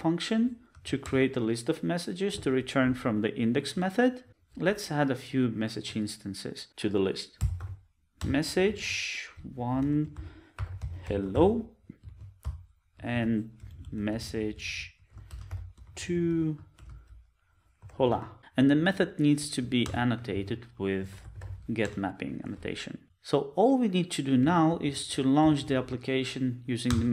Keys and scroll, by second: 12.3 Return, 13.1 super+d, 16.8 alt+shift+Left, 18.3 super+z, 22.0 Return, 24.7 ctrl+Up, 26.8 ctrl+Down, 26.9 alt+Return.